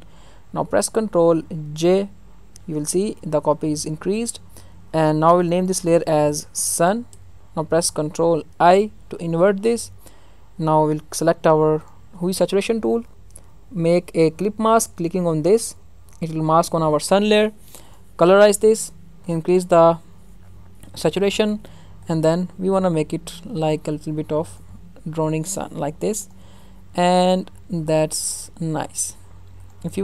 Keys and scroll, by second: 1.6 ctrl+j, 7.1 Return, 8.5 ctrl+i.